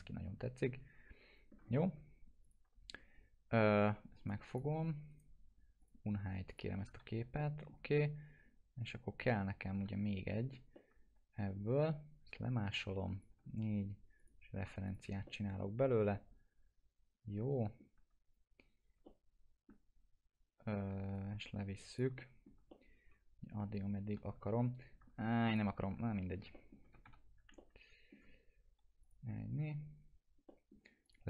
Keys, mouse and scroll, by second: 1.8 scroll up 1, 3.5 scroll down 1, 4.3 click, 5.1 right click, 5.8 click, 6.5 ctrl+click, 7.0 alt+q, 7.4 alt+middle click, 9.2 click, 9.7 scroll up 1, 10.3 middle click, 10.7-11.7 alt+middle drag, 12.7-13.4 shift+drag, 14.2 click, 15.2-15.9 middle click, 16.1-18.0 alt+middle drag, 19.1-19.7 alt+middle drag, 21.1-22.1 click, 22.2 alt+middle click, 22.7-24.2 middle drag, 25.5 ctrl+click, 26.0 alt+q, 26.5 middle click, 26.8 f, 27.5-28.2 alt+middle drag, 29.0 click, 30.5 middle click, 31.0 click.